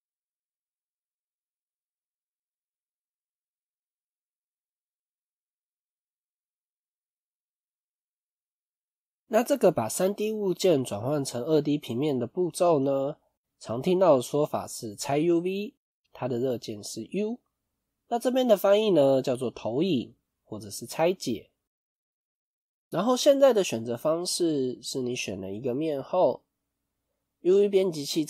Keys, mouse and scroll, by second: 8.6 middle click.